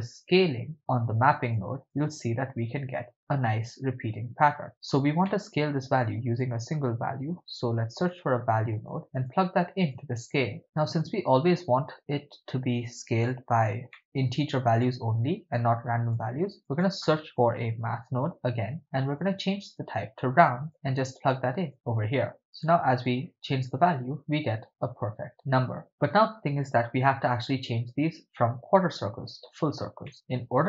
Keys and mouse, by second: 0.7 click, 0.7 middle click, 1.6 shift+click, 1.9-4.7 shift+drag, 5.3-5.8 middle drag, 6.0 shift+a, 9.9-10.6 drag, 13.9 middle click, 14.8-16.2 drag, 16.7 shift+a, 19.6-20.7 drag, 21.2-21.8 drag, 22.5 click, 23.1-25.3 drag, 30.1 middle click.